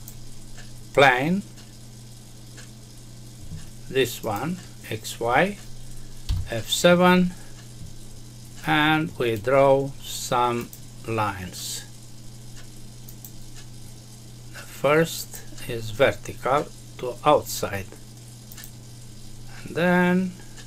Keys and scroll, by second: 6.2 F7.